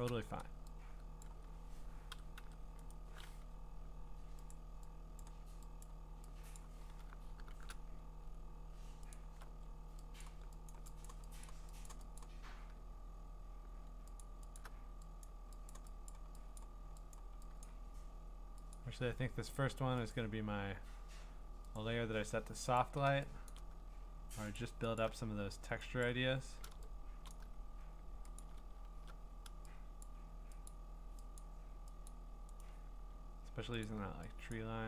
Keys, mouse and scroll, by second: 0.0 click, 0.1 click, 0.1 click, 1.2 click, 1.9-2.9 typing, 4.0 right click, 4.5 click, 5.2 click, 5.8 click, 6.6 click, 7.5 !, 9.1-12.5 alt+click, 10.2 click, 10.7 click, 11.1 click, 11.5 click, 11.9 click, 12.2 click, 14.2-14.7 alt+click, 14.6 click, 15.2 click, 15.7 click, 16.1 click, 16.5 alt+click, 16.7 click, 16.7 alt+click, 17.2 click, 17.7 click, 17.7 alt+click, 18.7 click, 20.2 click, 23.5 click, 24.6 alt+click, 25.0 click, 26.1 click, 28.4 alt+click, 28.7 scroll, 30.0 click, 30.7 click, 31.4 click, 32.1 click, 32.6 right click, 33.9 click, 34.5 click.